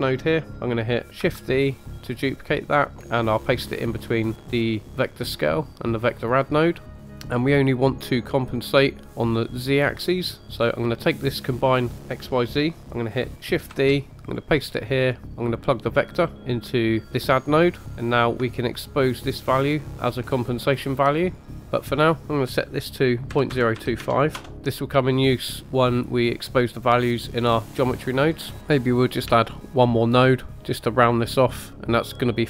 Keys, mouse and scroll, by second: 1.2 shift+d, 7.0 click, 8.5-10.4 drag, 11.0 click, 13.7 shift+d, 14.2 click, 15.2 middle click, 16.1 drag, 18.0-20.8 drag, 21.7-24.4 drag, 24.5 middle click, 26.0 click, 29.4 shift+middle click, 30.1 middle click, 30.6 scroll up 2, 30.6 middle click, 31.3-31.6 scroll up 2, 31.6 middle click.